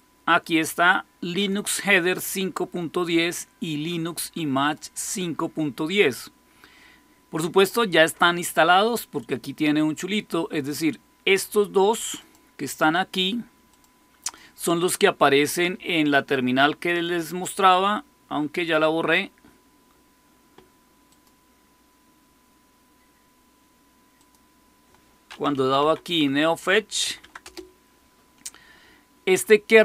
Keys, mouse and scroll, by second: 1.3-12.2 drag, 12.7 click, 13.6 click, 14.2 click, 16.8 click, 21.0 click, 24.1 click, 25.2-26.9 typing, 27.1 Tab, 27.3 Return.